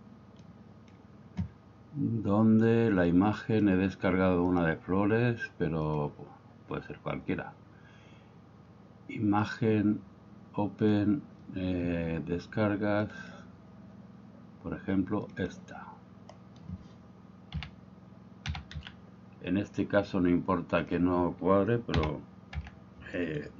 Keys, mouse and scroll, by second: 0.5 click, 3.1 click, 4.5-6.1 drag, 9.5-11.2 drag, 17.6 a, 18.5 s, 18.8 x, 20.9 drag, 22.0 s, 22.6 z, 23.2 right click.